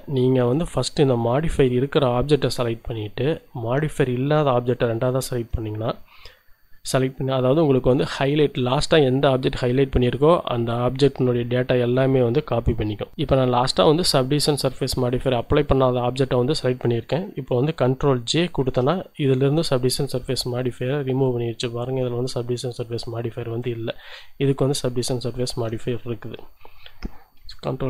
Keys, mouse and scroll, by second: 0.5 click, 4.9 shift+click, 18.6 ctrl+j, 19.8 scroll up 2, 20.3 z, 24.0-25.8 middle drag, 26.4 ctrl+z.